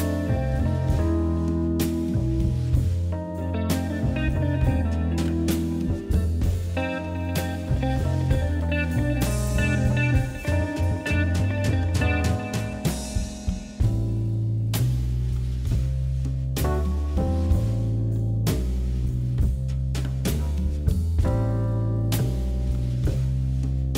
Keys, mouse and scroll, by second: 1.1 scroll down 1, 1.4-2.3 shift+middle drag, 5.8 s, 7.1 s, 8.4 g, 9.4 KP_7, 9.9 shift+middle click, 10.3 scroll up 3, 10.5-11.0 shift+middle drag, 11.0 s, 12.7 g, 13.6 KP_1, 14.1 scroll up 2, 14.4-15.9 shift+middle drag, 17.2 shift+right click, 18.0 shift+a, 20.2 s, 22.2 click, 22.9 Tab, 23.2 i.